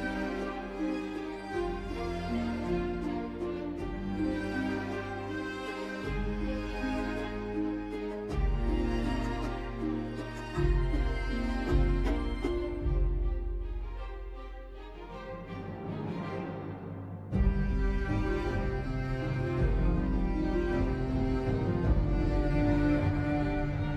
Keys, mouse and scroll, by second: 3.7 typing, 4.4 Return.